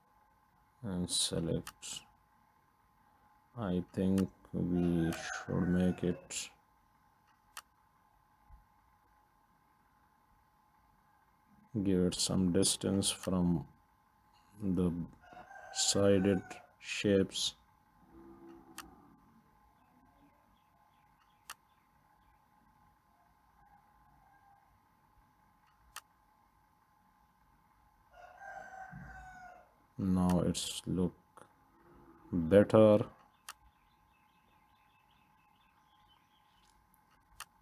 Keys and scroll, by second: 35.0 Left, 35.3 Left, 35.6 Left.